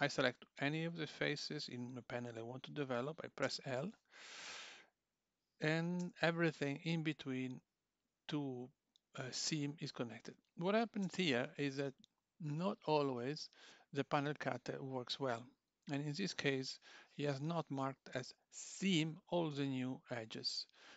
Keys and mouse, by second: 3.4 l, 4.5 click, 6.0 l, 10.1 click, 11.0 l.